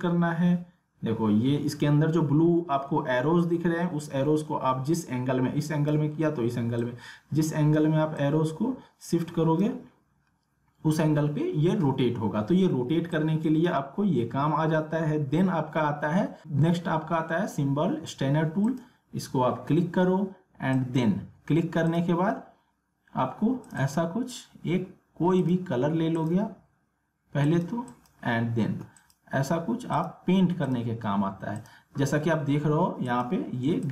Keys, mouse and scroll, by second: 13.1-18.7 drag, 27.7 click, 30.5 click, 31.4 click.